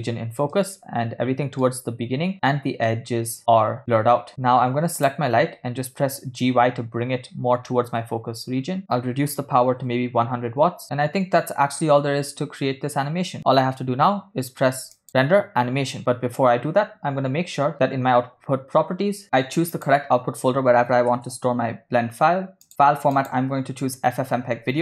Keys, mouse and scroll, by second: 1.2-2.3 ctrl+middle drag, 3.4-4.5 ctrl+middle drag, 5.8 click, 8.8 g, 8.8-10.8 drag, 15.1-17.0 drag, 18.5-19.2 scroll down 2, 20.3-23.1 drag, 21.9 /, 23.9-24.8 drag.